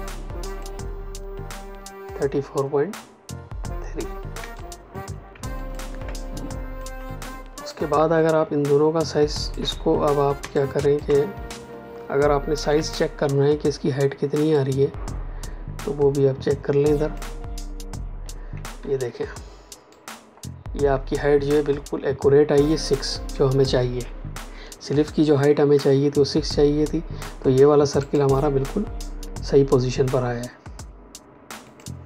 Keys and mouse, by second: 0.4 click, 4.3 space, 4.5 click, 4.8 space, 5.5 ctrl+alt+click, 6.3 click, 10.3 space, 10.5 click, 10.8 space, 12.6 m, 14.5 click, 18.7 v, 19.8 click, 27.9 click, 31.6 click.